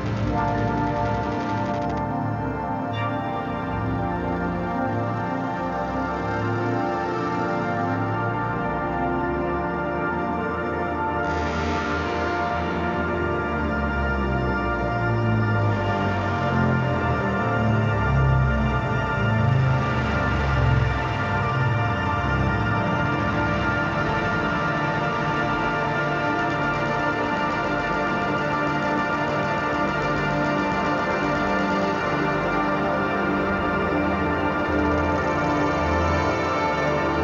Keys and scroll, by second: 3.1 [, 4.0 ], 10.2 x, 16.9 ctrl+z, 21.1 ctrl+z, 21.7-24.1 typing, 25.2-27.1 typing, 28.7 [, 28.9 ], 29.0 [, 29.8 ], 31.2-33.5 typing.